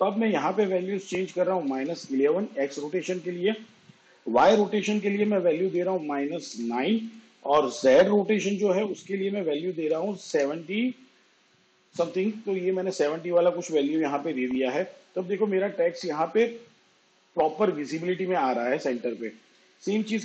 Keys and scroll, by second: 0.1 1, 4.1 -, 4.7 9, 8.1 7, 8.5 0.